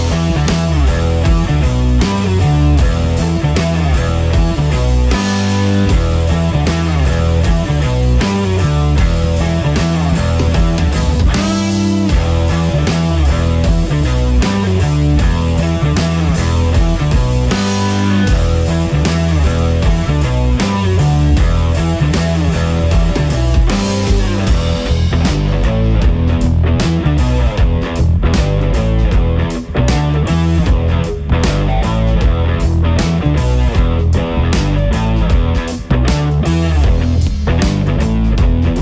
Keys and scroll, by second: 28.7 ctrl+c, 29.8 ctrl+v.